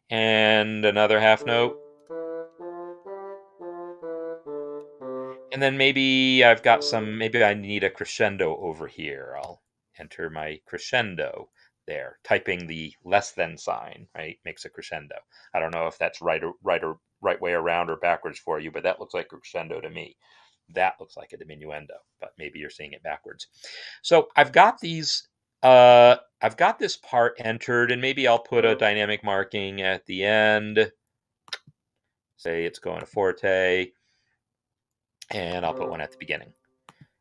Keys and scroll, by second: 1.1-5.1 typing, 5.5 Escape, 6.4 Left, 7.0 shift+Left, 7.0-9.7 typing, 23.4 Escape.